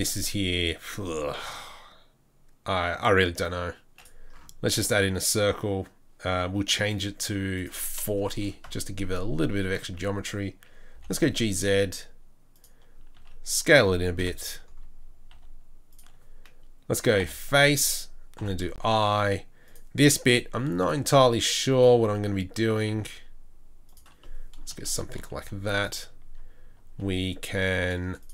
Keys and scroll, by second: 9.9 Tab, 11.0 g, 13.2 s, 14.2 KP_7, 15.3 s, 17.2 f, 18.4 i, 20.2 i, 20.9 i, 21.9 i, 22.9 i, 25.4 3, 27.4 2.